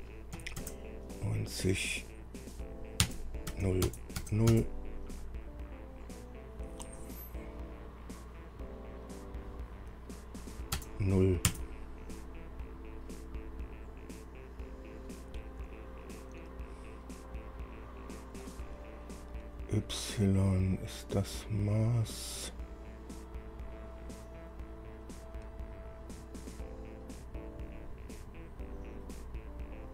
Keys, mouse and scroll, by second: 0.6 KP_9, 0.8 KP_0, 3.2 KP_Enter, 3.7 KP_0, 4.1 KP_Enter, 4.8 KP_Enter, 4.8 KP_0, 11.0 KP_0, 11.7 KP_Enter.